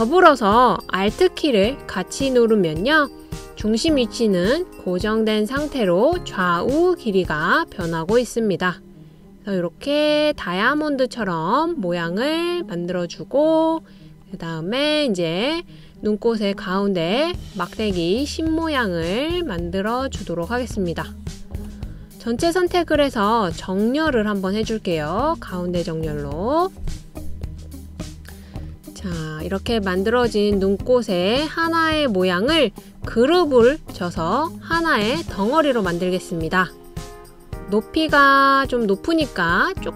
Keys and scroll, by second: 28.0 Left, 28.4 Left.